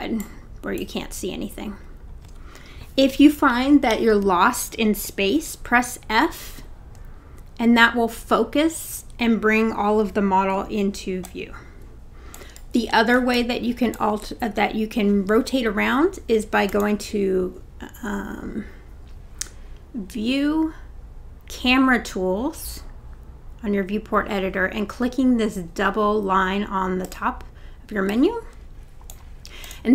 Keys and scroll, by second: 5.6 f.